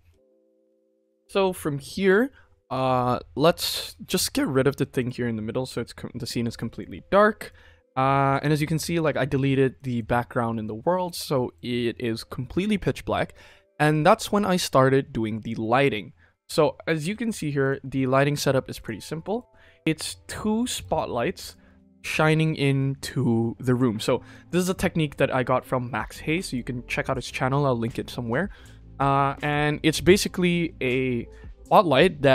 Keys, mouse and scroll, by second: 0.1 ctrl+s, 4.9 click, 6.5-7.0 right drag, 7.0 scroll down 1, 7.0-7.4 middle drag, 7.6 scroll up 2, 7.9-8.3 middle drag, 8.5 ctrl+s, 8.7 shift+middle click, 9.4 ctrl+s, 9.7 middle click, 10.6 middle drag, 10.9-11.4 middle drag, 12.9 middle click, 13.9-14.2 shift+middle drag, 15.4 click, 16.1-17.1 scroll down 3, 17.1 KP_1, 17.6 click, 18.8 click, 20.4-20.7 shift+middle drag, 20.9 scroll up 1, 21.4 click, 21.7 shift+middle drag, 23.6 click, 24.2 click, 24.6 click, 26.4 click, 27.1 click, 29.4 click, 30.1 click.